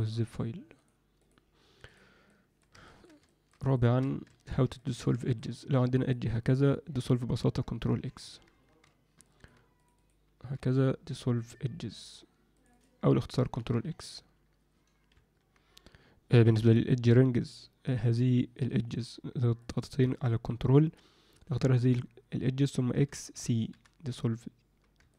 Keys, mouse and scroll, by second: 0.7 click, 1.2 click, 2.3-2.6 alt+middle drag, 2.8 ctrl+alt+middle drag, 3.2 alt+shift+middle drag, 3.7-4.0 ctrl+alt+middle drag, 4.2 Tab, 4.7 ctrl+middle click, 5.1 alt+shift+middle click, 5.8 click, 6.0 click, 7.9 ctrl+x, 8.6 ctrl+z, 9.2 alt+middle click, 9.8 click, 9.9 click, 10.3 x, 12.5 click, 12.7 click, 13.5 ctrl+x, 15.1 ctrl+F9, 15.2 ctrl+F10, 19.7 ctrl+click, 22.9 x, 25.1 ctrl+click.